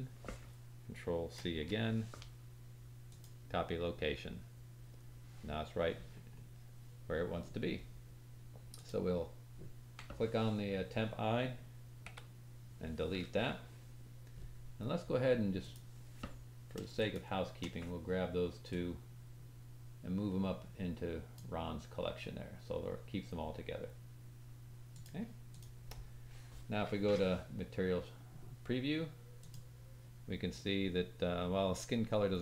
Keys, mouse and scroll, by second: 1.3 ctrl+c, 5.7-6.4 scroll up 4, 8.7 click, 12.0 Delete, 15.5 click, 16.9 shift+click, 18.6-21.3 drag, 22.7-25.0 drag, 24.9 middle click, 24.9 right click, 25.4 click, 29.4 click, 30.4 scroll up 3, 31.3 scroll up 1.